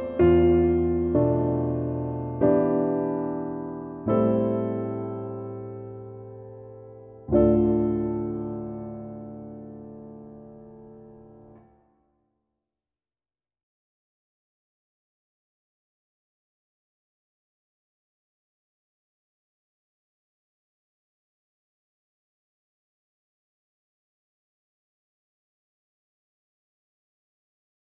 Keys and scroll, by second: 9.5 v.